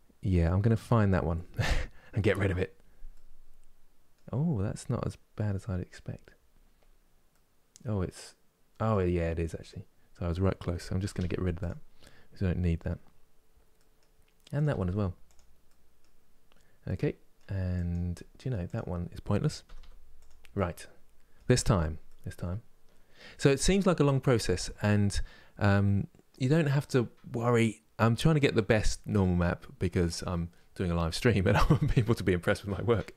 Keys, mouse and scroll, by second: 0.4 click, 1.9 KP_Decimal, 2.8-5.1 middle drag, 5.1-6.6 scroll down 14, 6.9-8.8 middle drag, 8.8-9.3 scroll up 5, 10.8 g, 13.1-13.4 scroll down 1, 13.4 middle click, 14.2 click, 14.3 g, 15.3 middle click, 15.9-16.3 scroll down 4, 16.6 middle click, 17.5 click, 17.8 middle click, 18.4 click, 19.3 g, 20.2-33.1 middle drag.